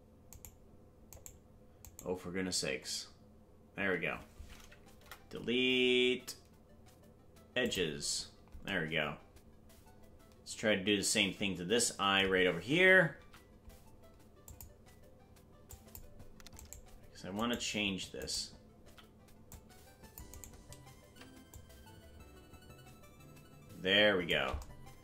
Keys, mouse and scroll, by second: 0.7 shift+right click, 4.9 Delete, 13.1 c, 19.1 right click, 21.5-24.2 shift+drag.